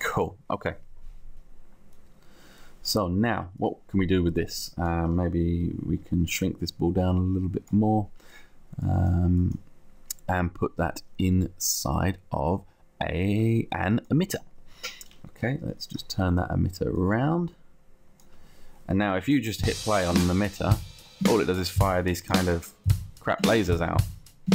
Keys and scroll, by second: 16.2 r.